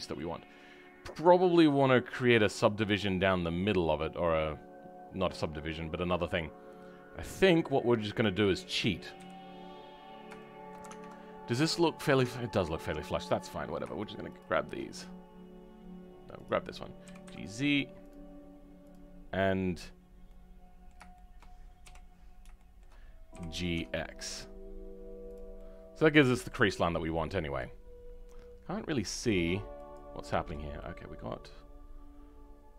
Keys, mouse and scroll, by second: 0.1 middle click, 0.5 middle click, 0.8-3.5 middle drag, 3.5-5.4 drag, 5.4-8.2 middle drag, 8.2 click, 9.1 KP_3, 9.5-9.9 scroll up 2, 10.3 shift+middle click, 12.2-14.3 shift+middle drag, 14.3 shift+click, 20.2 middle click, 21.8 KP_7, 22.2-22.5 scroll up 1, 22.5 shift+middle click, 23.3 g, 25.5 middle click, 27.0 middle click, 29.7-30.7 drag, 31.2-32.7 middle drag.